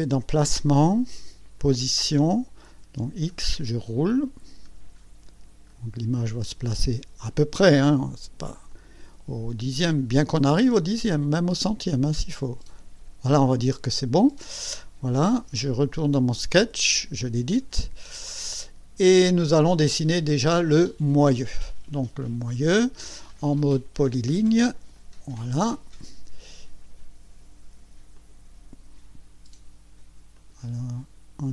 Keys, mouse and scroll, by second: 0.3 click, 1.6 click, 2.6 click, 3.2-6.5 scroll down 13, 6.9 scroll down 2, 8.7 click, 9.6-10.3 scroll up 3, 11.1-11.9 scroll up 4, 12.2 scroll up 2, 12.7 scroll down 2, 15.1 click, 15.6 click, 16.2 click, 18.0 scroll up 2, 18.6 scroll down 2, 22.2 scroll up 2, 24.9 click, 28.1 click, 30.3 click.